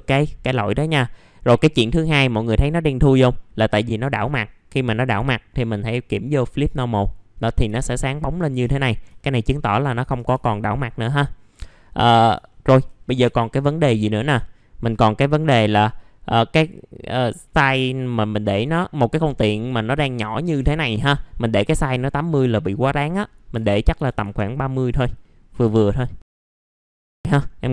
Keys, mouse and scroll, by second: 0.6-0.9 scroll down 1, 1.0 alt+middle click, 2.1 middle click, 2.3-3.1 scroll down 1, 3.1 alt+middle click, 6.5 click, 7.3 scroll up 1, 7.8 alt+middle click, 8.8 scroll up 1, 9.1 alt+middle click, 10.6-11.1 scroll down 1, 11.1-11.7 scroll up 1, 12.4 alt+middle click, 13.0 scroll up 1, 13.2 F4, 13.5 middle click, 13.9-15.0 scroll up 1, 16.3-17.6 drag, 20.1 scroll down 1, 20.6-21.9 middle drag, 21.9 click, 23.5 KP_3, 25.2 middle click, 25.6 F4, 25.8-26.2 scroll up 1, 26.2 alt+middle click, 26.7 scroll down 1, 27.1-27.7 scroll up 1.